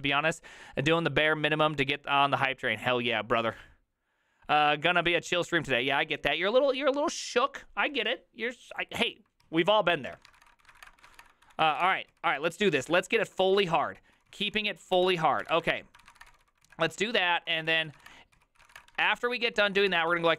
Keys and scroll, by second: 10.2 alt+{, 10.2 ctrl+c, 10.3 ctrl+:, 10.5 Return, 10.5-11.9 typing, 11.8 ctrl+:, 11.9 Return, 12.0 ctrl+u, 12.2 ctrl+u, 13.5-20.3 typing, 15.1 ctrl+y.